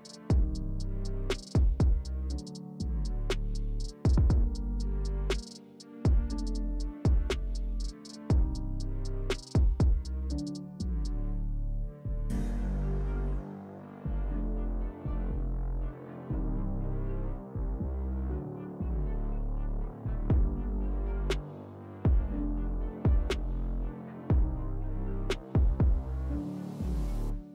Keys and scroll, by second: 0.8-1.7 typing, 3.1 4, 3.7 3, 8.8 s, 9.5 3, 11.1 s, 14.6 s, 18.4 alt+e, 20.7 s, 21.9 s.